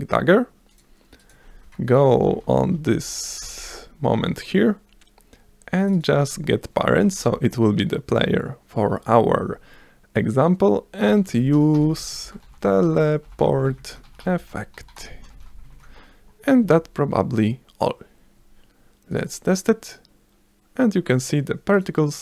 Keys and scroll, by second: 2.8 c, 3.1 Right, 3.4 Return, 3.7 Up, 5.8 v, 7.3 BackSpace, 11.0-15.5 typing, 16.6 s.